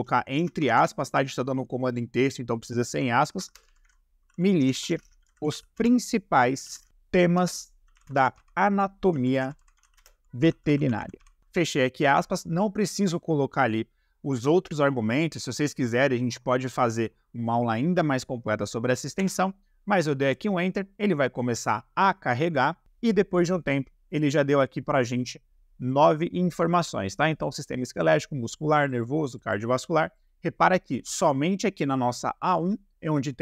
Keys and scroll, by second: 0.6 shift+`, 3.3-11.4 typing, 19.2 Return.